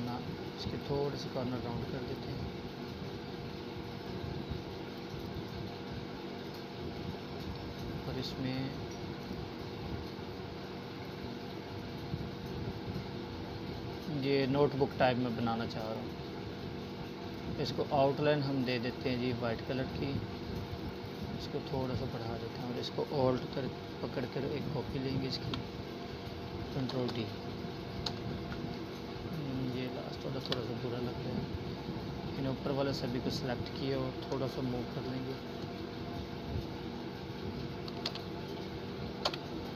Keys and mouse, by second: 5.3 click, 5.4 right click, 7.1-11.0 drag, 20.0-21.5 alt+drag, 22.8 ctrl+d, 25.9 click, 26.5 Delete, 28.0-29.5 drag, 34.2 Right, 35.8-39.7 drag.